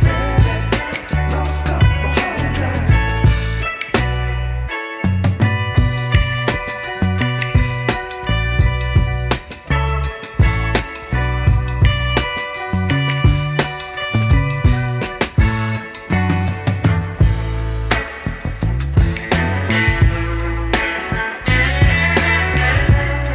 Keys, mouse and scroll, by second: 1.2 click, 2.6-6.9 drag, 7.7-11.1 drag, 12.7 s, 19.5-20.9 scroll up 5, 21.9-23.3 drag.